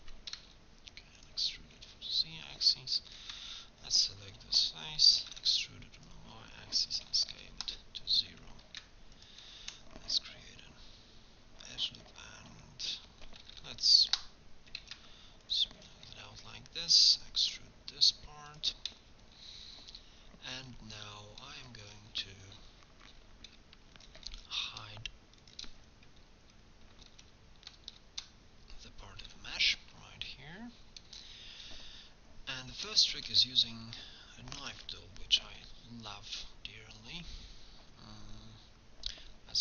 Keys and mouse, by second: 0.3 e, 1.6-4.0 drag, 5.3 e, 7.1 s, 8.7 ctrl+r, 13.5 s, 14.8 ctrl+Tab, 17.5 e, 23.6-26.0 drag, 27.2 ctrl+shift+h, 27.9 shift+h, 29.2 KP_3, 29.9 KP_1, 34.6 k.